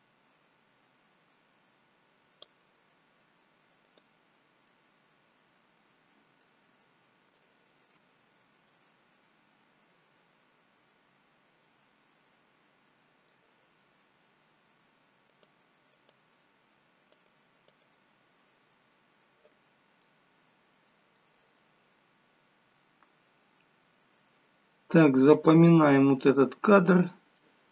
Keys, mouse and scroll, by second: 3.8 click, 4.6 middle click, 7.2 shift+middle click, 8.2 scroll up 2, 8.5 middle click, 15.2 click, 15.9 click, 17.0 click, 17.7 click, 19.9 middle click, 24.5-26.4 scroll down 8, 25.2 middle click, 26.4-26.9 scroll down 1, 27.4 shift+middle click.